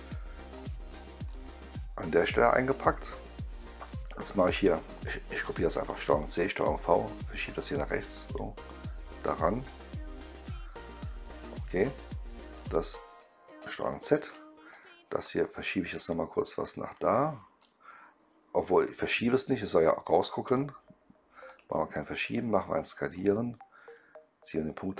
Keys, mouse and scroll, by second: 0.4 click, 1.2 right click, 4.4 click, 5.9 ctrl+c, 6.1 ctrl+v, 7.4-9.1 drag, 9.4 right click, 11.3 click, 12.5 click, 14.1 ctrl+z, 14.6 click, 15.2-15.7 right drag, 16.8 click, 17.5-19.4 right drag, 20.4 click, 21.4 click, 21.8 click, 23.1 click.